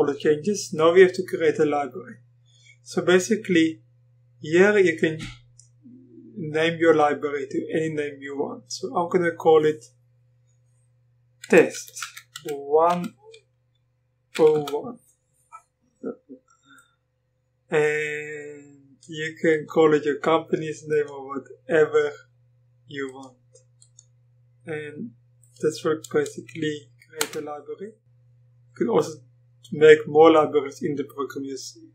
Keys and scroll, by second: 11.4 typing, 12.9 typing, 14.1-15.1 typing, 27.2 Return.